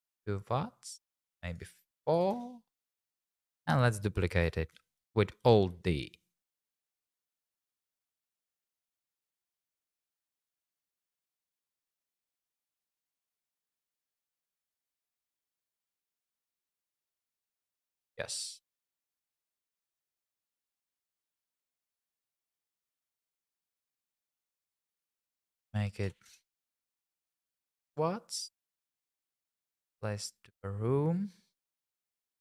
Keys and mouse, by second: 1.5 click, 3.2 `, 3.9 shift+z, 5.4 alt+d, 5.7 x, 6.9 click, 9.2 alt+s, 9.4 x, 10.5 alt+s, 11.4 x, 13.4 click, 14.8 alt+d, 15.2 x, 18.5 shift+z, 19.0 shift+click, 22.5 KP_0, 25.4 click, 28.9 m.